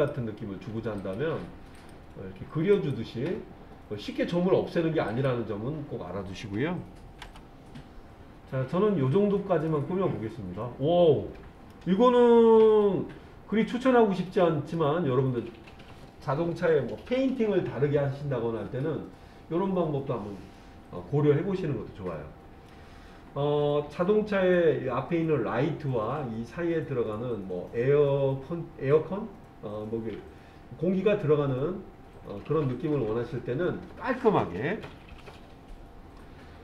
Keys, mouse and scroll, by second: 9.7-11.7 middle drag, 14.7-22.7 middle drag, 35.0 KP_1, 36.4-36.6 scroll up 3.